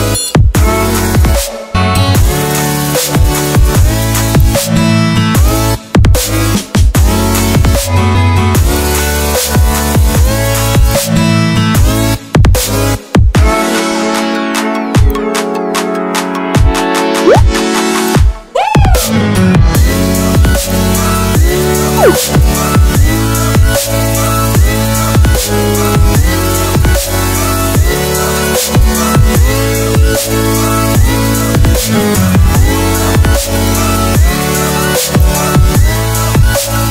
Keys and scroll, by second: 27.0 ctrl+z.